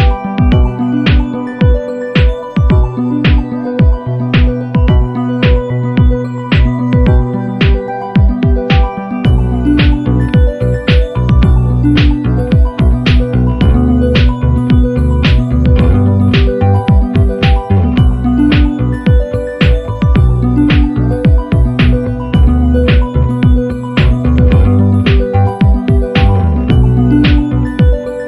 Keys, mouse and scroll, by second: 2.2 shift+click, 3.9 click, 4.5 click, 5.6 ctrl+d, 6.9 click, 10.3 click, 11.9 click, 12.9-13.5 ctrl+scroll down 4, 14.9-17.0 drag, 17.8 click, 18.3 shift+click, 21.2 click, 23.0 click, 23.5 click, 25.3 click, 26.1 click, 26.7-28.2 drag.